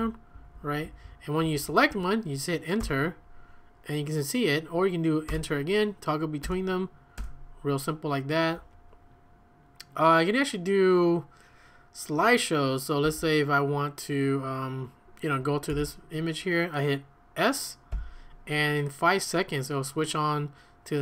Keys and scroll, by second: 0.3 Left, 0.5 Left, 0.8 Up, 1.0-2.8 typing, 1.4 Down, 1.9 Right, 2.8 Return, 5.3 typing, 6.4-7.7 typing, 13.0 j, 15.7 Return, 17.9 s.